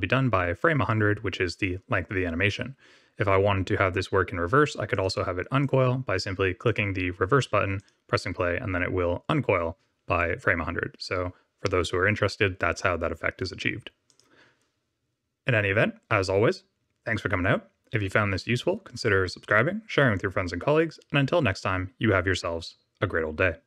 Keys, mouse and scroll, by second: 5.0 click, 5.5 click, 6.7 click, 7.7 click, 14.1 click.